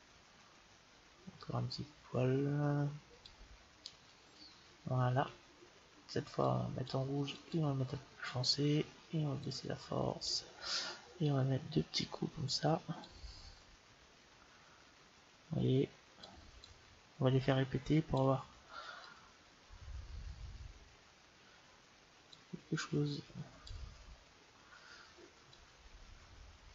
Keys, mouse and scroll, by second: 1.3-3.1 drag, 6.3-8.9 drag, 9.3-11.0 drag, 11.2-14.6 drag, 16.5-18.2 drag, 19.0-20.6 drag, 22.7-24.5 drag, 25.5-26.7 drag.